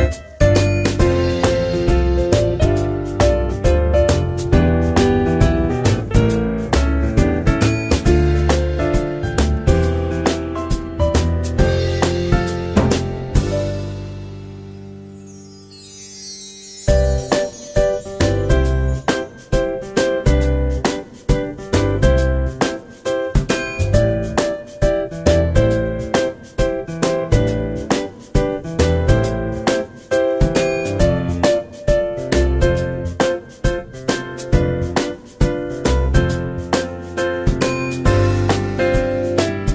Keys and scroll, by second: 5.2 ctrl+z, 5.4 ctrl+z, 7.9 Tab, 8.4-9.3 typing, 23.8 ctrl+x, 24.3 ctrl+v, 26.6 ctrl+z, 26.7 ctrl+z, 26.9 ctrl+z, 30.3-31.0 typing, 33.2-33.9 typing.